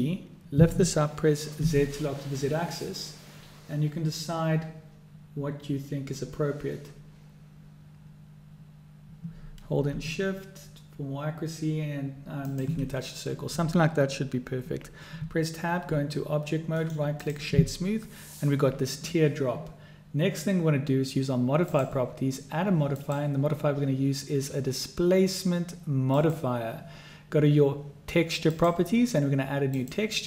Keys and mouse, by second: 15.2 Tab, 16.8 click, 21.6 click, 23.0-26.3 drag, 28.5 click, 29.8 click.